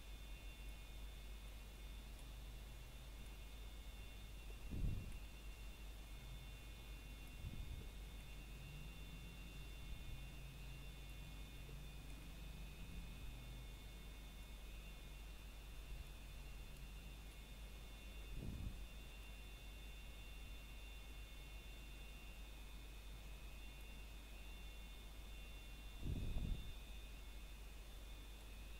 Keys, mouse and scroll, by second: 1.1 b, 2.3 click, 4.7 b, 6.0 click, 8.0 b, 9.0 click, 10.4 b, 11.6 click, 13.2-13.7 scroll down 1, 13.9 shift+middle click, 14.4 scroll up 1, 15.0 shift+middle click, 15.2 scroll up 1, 16.9 b, 18.0 click, 20.1 b, 21.5 click, 24.1 b, 26.7 click.